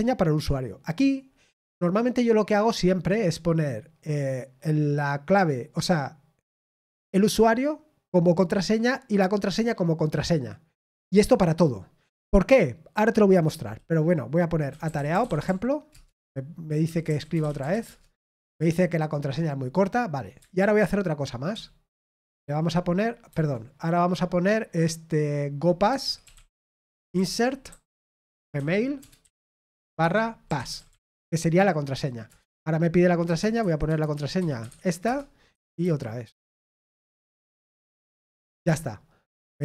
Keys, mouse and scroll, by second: 15.2 typing, 29.8-31.0 typing.